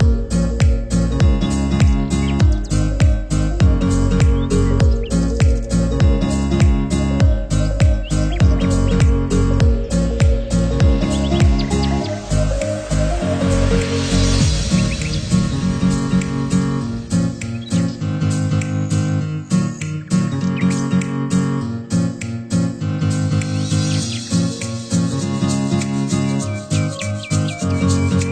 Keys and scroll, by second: 0.2 ctrl+0, 0.9 ctrl+=, 1.9 ctrl+=, 3.4 Delete, 6.4 ctrl+=, 7.1 Delete, 7.4 ctrl+z, 8.0 Delete, 9.6 ctrl+z, 13.3 ctrl+0.